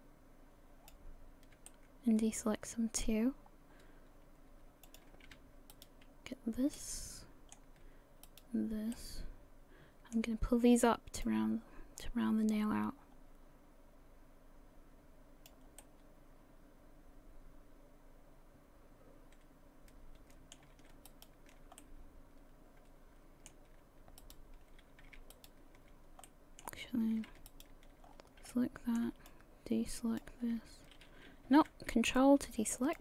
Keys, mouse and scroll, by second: 1.7 middle click, 3.2-3.8 scroll up 4, 4.9 click, 5.7 shift+right click, 6.7 scroll up 1, 6.8 middle click, 8.3 shift+right click, 8.9 middle click, 11.3 click, 15.7 scroll down 1, 15.8 middle click, 21.1 alt+shift+right click, 21.8 middle click, 24.2 shift+right click, 25.3 alt+shift+right click, 26.3 middle click, 27.5 alt+shift+right click, 28.1 scroll down 4, 28.5 middle click, 30.5 shift+click, 31.5 ctrl+z, 32.2 ctrl+click.